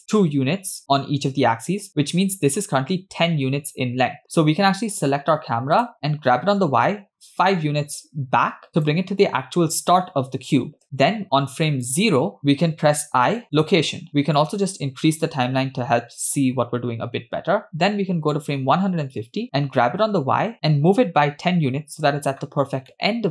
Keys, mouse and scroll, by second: 4.4-4.7 middle drag, 5.8 click, 6.4 g, 11.7 click, 13.2 i, 14.4-16.3 drag, 18.4 click, 19.8 g, 23.0-23.3 middle drag.